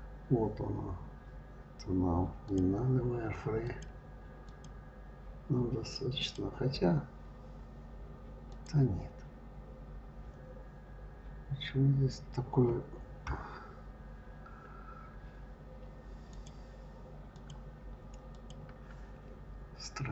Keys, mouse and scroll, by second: 2.3 click, 3.5 click, 4.3 click, 6.0 click, 8.3 click, 10.8-13.1 scroll up 2, 13.1 KP_3, 16.1 click, 17.2 click, 18.2 click.